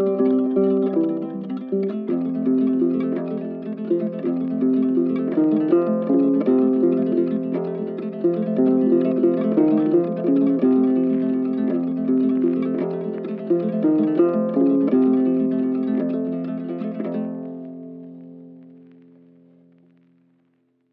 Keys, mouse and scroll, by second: 1.5 double click, 6.7 shift+click, 7.4 right click, 9.0 right click, 9.5 shift+click, 12.1 shift+click, 13.7 shift+click, 15.3 shift+click, 16.3 shift+click, 17.0 shift+click, 20.5 ctrl+click.